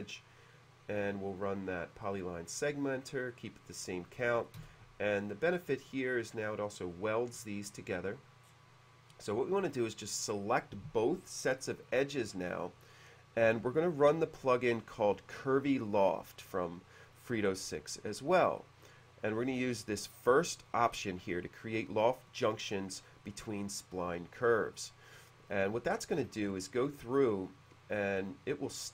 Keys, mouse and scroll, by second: 1.3 click, 2.0 click, 3.3 click, 4.2 middle click, 4.6 space, 6.2 click, 7.0 click, 7.4 drag, 8.5-8.8 scroll down 1, 9.3 click, 17.2-18.2 drag, 26.2 click.